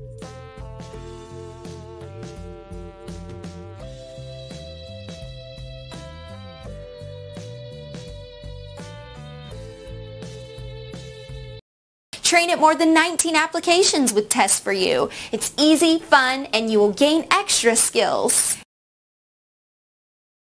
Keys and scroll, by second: 1.8 Return, 6.2 Return.